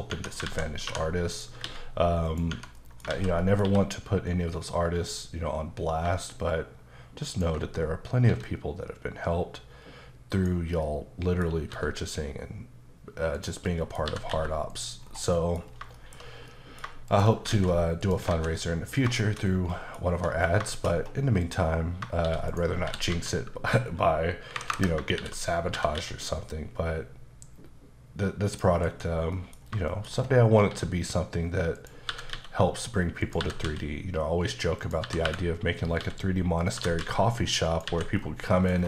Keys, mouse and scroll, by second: 0.2 Tab, 0.5 alt+z, 1.4 click, 1.7 x, 2.3 click, 2.5 Tab, 2.8 middle click, 3.1 alt+z, 3.7 q, 7.3 ctrl+click, 8.3 s, 10.4 click, 10.9 middle click, 11.7 s, 13.4 click, 13.7 middle click, 14.1 typing, 14.7 click, 15.1-15.4 scroll down 2, 15.4 middle click, 15.6 scroll down 2, 16.0 shift+middle click, 16.3 scroll down 1, 16.5 middle click, 17.1 shift+click, 18.0 click, 18.3 alt+a, 18.6 middle click, 19.0-19.7 scroll down 3, 19.2 shift+middle click, 19.7 middle click, 20.2 1, 20.3-20.6 scroll up 1, 20.7 shift+middle click, 21.0-21.4 scroll up 1, 21.4 click, 22.2-23.1 typing, 22.5 right click, 24.5 KP_9, 24.7 KP_Enter, 25.2 shift+r, 28.3-28.9 typing, 28.5 click, 29.3 middle click, 29.6-30.7 scroll up 4, 29.9 shift+middle click, 30.7 s, 31.8 click, 32.1 typing, 33.2 click, 33.4 typing, 34.8 click, 35.0-37.0 typing, 36.6 click, 37.7 click, 38.2-38.5 scroll down 2, 38.5 middle click, 38.8 scroll down 3.